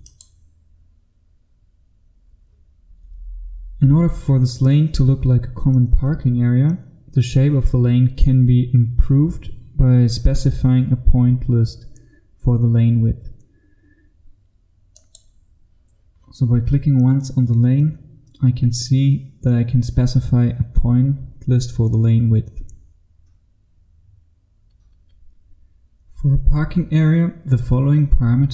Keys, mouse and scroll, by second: 25.2 F2, 25.3 F3.